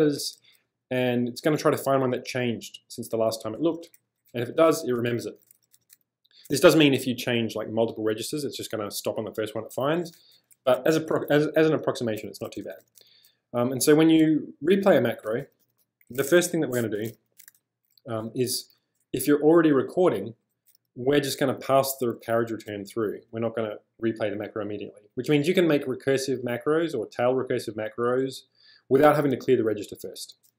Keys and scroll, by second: 0.2 j, 2.9-5.9 typing, 12.1-18.2 typing.